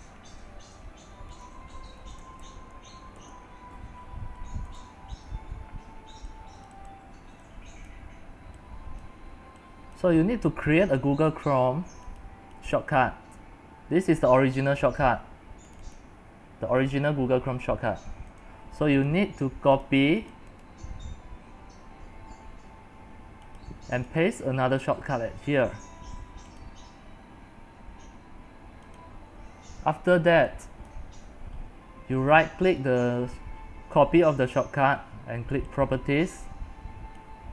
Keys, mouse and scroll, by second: 0.0-2.4 drag, 2.2-3.1 typing, 3.3 Return, 4.9 click, 5.6 ctrl+v, 7.0 click, 9.6-20.8 drag, 20.8-23.7 right drag, 23.7-25.1 drag, 25.1-26.6 right drag, 26.6-32.4 drag, 32.4-35.9 right drag, 35.9-37.5 drag.